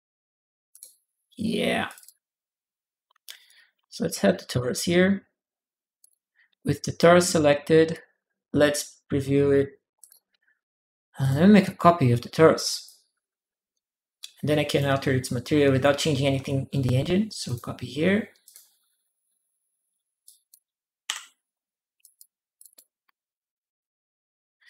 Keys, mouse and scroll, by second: 0.5 click, 1.6 click, 1.8 click, 3.2-4.8 typing, 3.2-4.8 drag, 5.8 click, 7.0 click, 7.7 click, 9.8 click, 11.0 click, 12.6-14.5 drag, 17.2 click, 18.2 click, 20.0 click, 21.8 click, 22.3 click, 22.5 click.